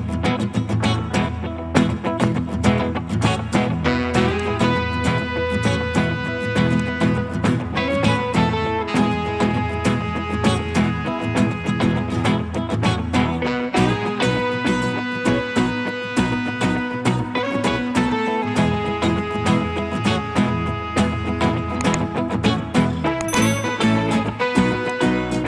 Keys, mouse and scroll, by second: 0.9 scroll down 1, 1.8 scroll up 1, 8.1 scroll down 1, 9.3 middle click, 20.1-22.4 scroll down 1, 25.3 double click.